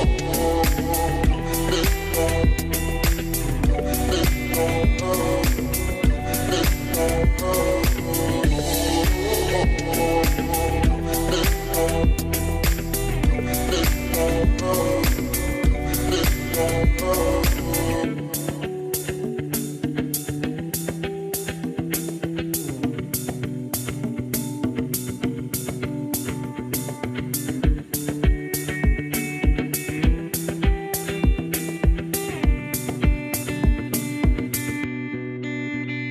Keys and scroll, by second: 3.5 1, 3.7 Return, 9.4-10.3 typing, 13.1-15.4 typing.